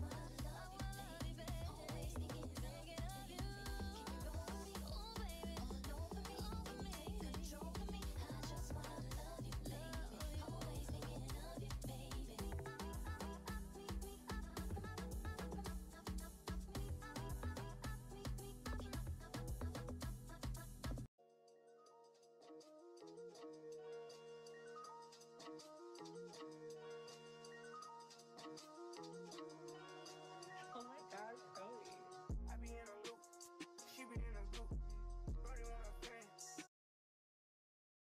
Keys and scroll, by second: 3.5 alt+q.